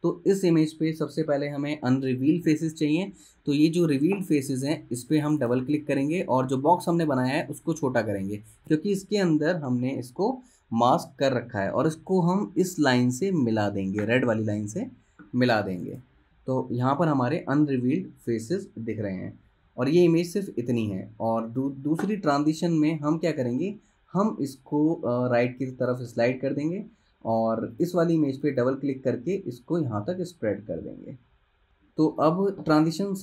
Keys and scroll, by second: 21.2 space.